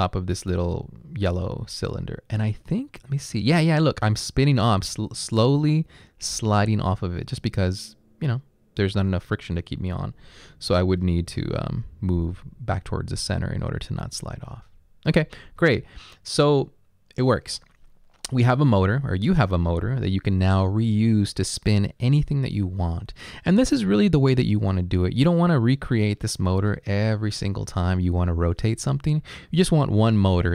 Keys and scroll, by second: 10.8 Up, 11.2 Left.